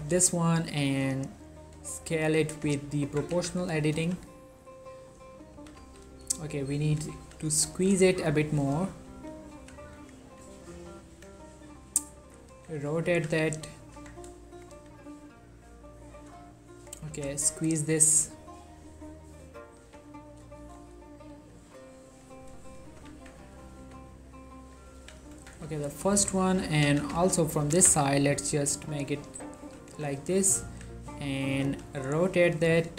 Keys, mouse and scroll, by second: 0.1 z, 0.4 scroll down 1, 0.6-0.9 scroll up 1, 2.6 click, 2.7 z, 3.2 Tab, 3.4 z, 4.1 g, 4.7 click, 5.6 s, 5.9 x, 7.3 y, 8.5 click, 8.9 r, 9.4 click, 9.6 g, 10.1-10.9 drag, 11.0 ctrl+middle click, 12.6 r, 13.1 click, 13.2 g, 13.7 click, 14.1 Tab, 14.6 click, 14.8 g, 15.3-15.8 scroll up 1, 15.8 scroll down 1, 16.0 right click, 17.0 shift+click, 17.2 s, 17.6 y, 18.4-19.3 scroll up 1, 19.3-19.7 scroll down 1, 19.7 click, 20.7 shift+middle click, 21.2 click, 21.4 g, 22.2 click, 22.5 scroll down 1, 22.8 shift+middle click, 23.1 z, 24.2 ctrl+middle click, 25.1 1, 25.4 Tab, 25.9 shift+middle click, 26.7 Tab, 27.0 a, 27.3 z, 27.7 s, 27.7 x, 29.6 click, 29.7 z, 30.0 Tab, 30.7 r, 31.6 click, 31.8 g, 32.8 click.